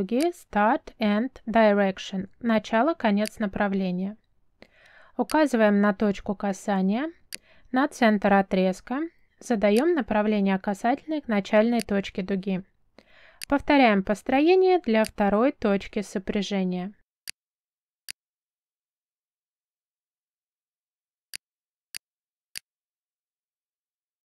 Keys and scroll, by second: 19.3 m, 20.3 space, 23.0 Escape.